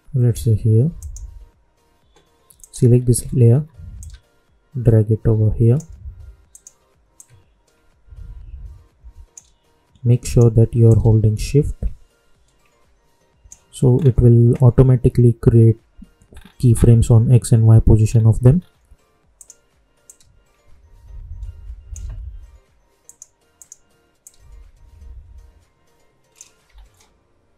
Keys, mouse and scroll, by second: 3.1-3.7 alt+scroll up 1, 3.9-13.9 drag, 13.9 scroll down 1, 16.2-16.6 scroll up 1, 16.7-18.0 scroll down 1, 18.1-18.5 scroll up 1, 19.3-23.0 drag, 23.0-26.7 drag, 26.7 scroll down 1.